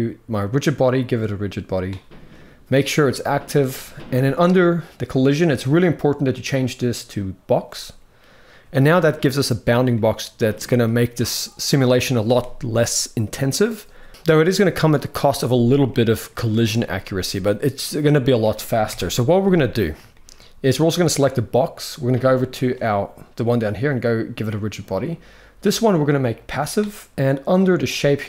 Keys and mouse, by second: 0.3 click, 5.5-7.1 drag, 8.2-8.7 middle drag, 9.6-10.5 middle drag, 15.6 middle click, 17.3-17.7 middle drag, 18.6 KP_1, 19.9 shift+middle click, 24.2 click, 25.6-26.2 drag, 27.6-28.2 drag.